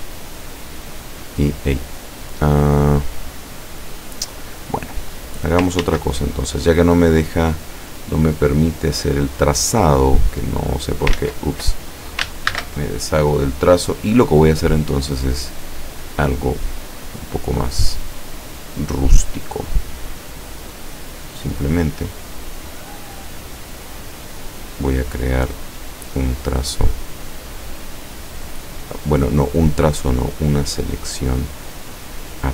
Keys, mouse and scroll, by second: 0.3-1.0 scroll down 4, 1.2 scroll up 2, 5.9 ctrl+z, 9.3 click, 10.3-11.2 drag, 11.2 ctrl+z, 12.5 ctrl+shift+a, 14.1 click, 16.3 click, 18.0 click, 18.9 click, 20.3 click, 21.3 click, 27.1 click, 29.3 click, 30.9 click, 31.7 click.